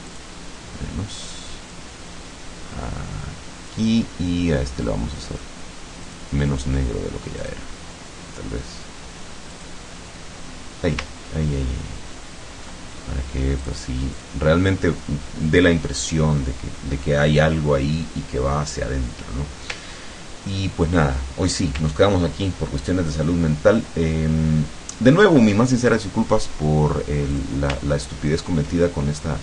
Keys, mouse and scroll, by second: 0.1 click, 1.8-3.9 drag, 6.1 click, 7.4 click, 9.6 click, 11.2-11.6 ctrl+scroll down 2, 12.0 ctrl+scroll down 2, 13.6 click, 14.2 click, 20.0 ctrl+scroll down 2, 20.6 ctrl+scroll down 2, 21.2 ctrl+click, 22.1 ctrl+scroll down 2, 22.8 ctrl+click, 25.1 scroll down 2, 27.4 click, 28.0 ctrl+click.